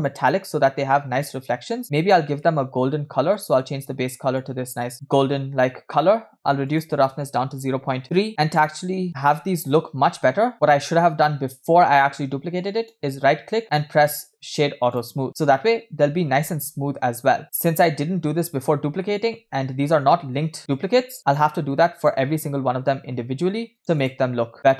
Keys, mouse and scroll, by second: 0.1-2.3 drag, 2.5-2.9 middle drag, 3.4 click, 5.6 middle click, 6.7-8.3 drag, 9.1 scroll up 1, 10.3 scroll down 1, 12.8-15.2 right drag, 15.6 scroll up 1, 18.1 scroll down 1, 19.1 shift+middle drag, 19.4 scroll up 2, 20.0-21.0 shift+middle drag, 21.3 right click, 23.8 right click, 24.6 scroll down 1.